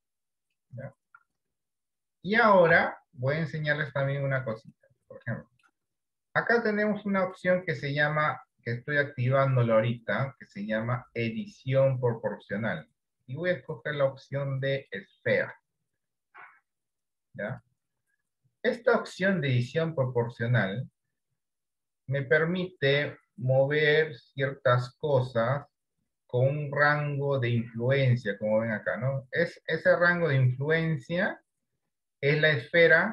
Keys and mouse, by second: 2.8 Tab, 3.8 shift+middle click, 5.3 shift+middle click, 7.3 click, 8.2 shift+middle click, 11.0-12.4 drag, 13.6-17.6 drag, 21.8-33.1 drag.